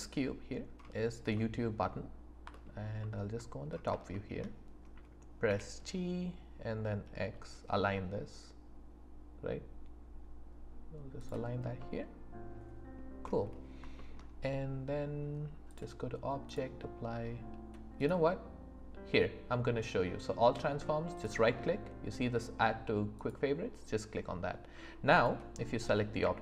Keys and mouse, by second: 1.3-1.8 middle drag, 4.1 shift+click, 5.4 g, 7.2 x, 11.8-12.9 drag, 13.9 shift+middle click, 15.7-24.1 drag, 25.1 click, 26.2 q.